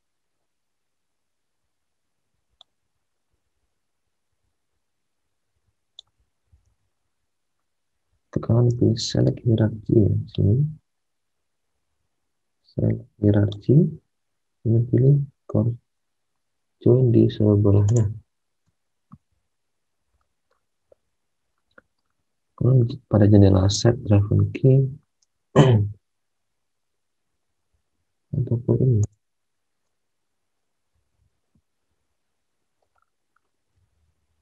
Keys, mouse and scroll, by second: 6.6 alt+Tab, 8.7 alt+Tab, 19.1 alt+Tab, 25.2 alt+Tab, 31.0 alt+Tab, 33.7 alt+Tab.